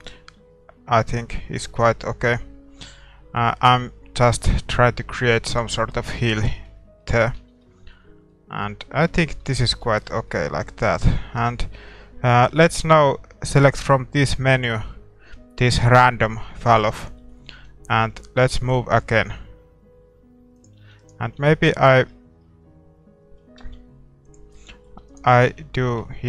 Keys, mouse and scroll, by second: 5.9-19.2 middle drag, 7.4 Tab, 9.4 Tab, 17.5 g, 20.8 a, 21.0-23.1 right drag, 21.4 g, 24.5-26.2 middle drag, 25.0 a, 25.1-26.2 right drag, 25.5 g.